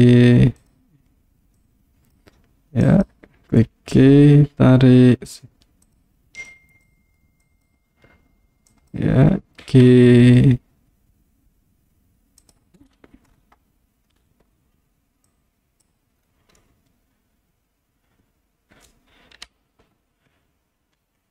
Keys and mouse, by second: 0.6 click, 1.7 click, 3.0 click, 3.7 g, 5.9 click, 6.5 click, 7.6 click, 8.7 click, 9.7 g, 12.4 click, 15.3 click, 16.7-19.0 middle drag, 19.5 KP_3, 21.0 KP_1.